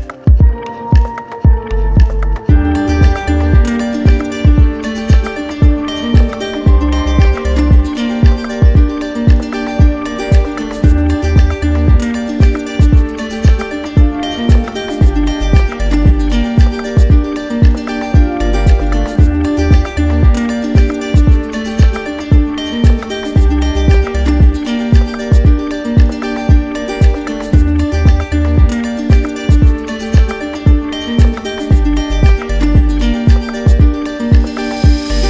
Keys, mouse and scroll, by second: 0.2 ctrl+z, 1.6 right click, 2.9 right click, 4.8 alt+click, 5.0 ctrl+z, 6.6 right click, 6.9 ctrl+z, 8.1 right click, 9.3 click, 10.8 click, 11.0 ctrl+z, 11.7 d, 14.3 click, 15.3 right click, 15.4 ctrl+z, 15.6 click, 15.8 right click, 15.9 ctrl+z, 15.9 right click, 16.1 right click, 16.4 right click, 16.5 click, 16.6 right click, 16.8 click, 17.0 click, 17.1 click, 17.1 right click, 17.3 right click, 17.4 ctrl+z, 17.4 click, 17.4 right click, 17.5 alt+click, 17.6 click, 17.9 click, 17.9 right click, 18.1 right click, 18.4 click, 18.8 right click, 19.0 right click, 19.2 click, 19.3 alt+right click, 19.3 right click, 19.5 right click, 19.5 click, 19.6 right click, 19.7 alt+click, 19.9 ctrl+z, 19.9 right click, 20.1 click, 20.2 right click, 20.4 alt+click, 20.4 right click, 20.5 click, 20.8 right click, 20.8 middle click, 21.0 shift+right click, 21.0 alt+click, 21.2 click, 21.3 alt+click, 21.4 alt+click, 21.6 ctrl+z, 21.6 alt+click, 21.7 alt+click, 21.8 right click, 21.9 alt+click, 22.0 ctrl+z, 22.0 alt+click, 22.1 right click, 22.2 right click, 22.2 alt+click, 22.3 right click, 22.4 right click, 22.4 click, 22.7 click, 22.9 right click, 22.9 alt+click, 23.1 right click, 23.2 alt+click, 23.3 alt+click, 23.4 right click, 23.5 click, 23.6 right click, 23.8 click, 23.9 right click, 23.9 right click, 24.0 alt+click, 24.1 click, 24.2 right click, 24.4 right click, 24.5 click, 24.7 right click, 24.8 right click, 24.9 click, 25.0 alt+click, 25.1 alt+click, 25.2 right click, 25.5 right click, 25.6 right click, 25.6 alt+click, 25.7 alt+click, 25.8 right click, 25.8 click, 25.9 right click, 26.0 right click, 26.1 right click, 26.3 right click, 26.4 alt+right click, 26.7 right click, 26.7 click, 26.8 alt+click, 26.9 right click, 27.0 alt+click, 27.1 middle click, 27.2 right click, 27.2 alt+middle click, 27.3 middle click, 27.6 right click, 27.6 right click, 27.7 alt+click, 27.8 middle click, 27.9 right click, 27.9 alt+middle click, 28.0 middle click, 28.2 alt+click, 28.3 right click, 28.6 alt+click, 28.6 right click, 28.7 right click, 28.8 alt+click, 29.2 right click, 29.3 right click, 29.5 right click, 29.7 alt+click, 29.9 alt+click, 30.0 right click, 30.1 alt+click, 30.2 right click, 30.3 alt+click, 30.4 alt+click, 30.6 alt+right click, 30.9 alt+right click, 31.2 alt+click, 31.3 alt+click, 31.4 click, 31.6 click, 31.6 alt+click, 32.1 right click, 32.1 right click, 32.3 right click, 32.5 right click, 32.6 right click, 32.8 right click, 33.0 click, 33.1 click, 33.2 click, 33.2 right click, 33.4 click, 33.6 click, 33.7 click, 33.8 right click, 34.0 right click, 34.1 right click, 34.3 right click, 34.3 right click, 34.4 d, 34.8 right click, 35.1 click.